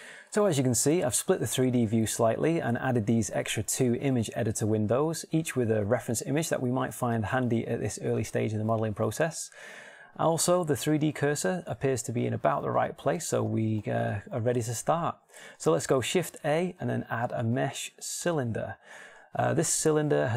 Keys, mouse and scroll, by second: 14.3-15.3 middle drag, 15.5 middle click, 16.9 shift+a, 19.3-20.3 middle drag.